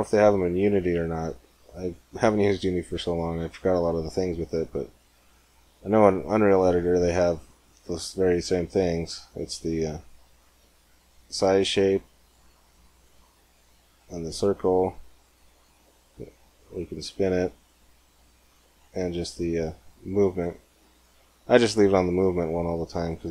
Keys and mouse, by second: 3.2-6.8 drag, 6.8 click, 8.2-12.0 drag, 11.9 middle click, 12.6-15.4 drag, 15.4 middle click, 18.5-22.1 drag, 22.1-23.3 middle drag.